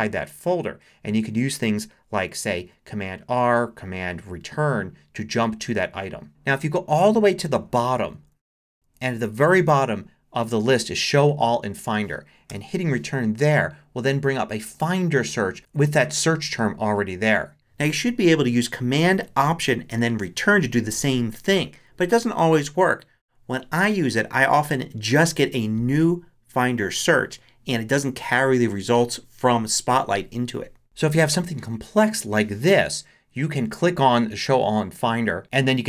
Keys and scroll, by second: 2.5 Down, 5.6 super+r, 6.9 super+Down, 8.7 Down, 12.5 Return.